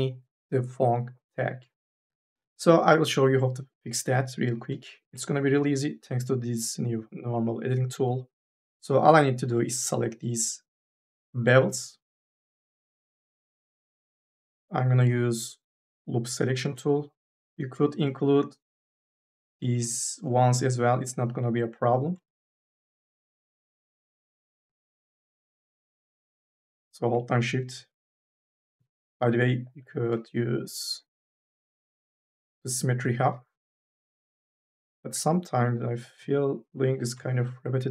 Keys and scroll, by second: 7.9 3, 9.3 u, 9.6 l.